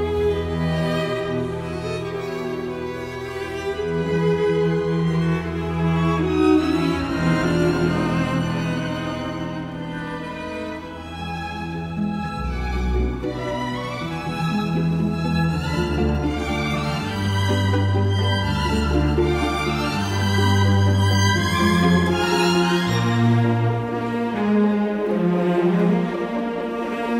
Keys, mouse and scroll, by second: 8.6 Escape.